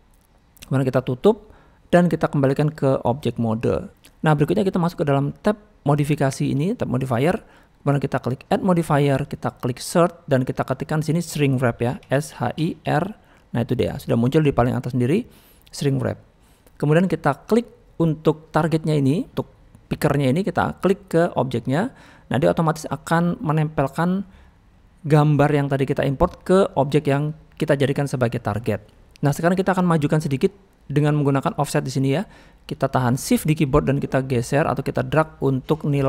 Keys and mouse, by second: 1.2 click, 2.4-3.1 drag, 3.5-3.9 middle drag, 4.3 middle drag, 8.5-16.2 drag, 23.1-23.5 middle drag, 24.7-26.1 middle drag, 29.1 middle click, 29.4 middle click, 34.0-36.0 shift+drag.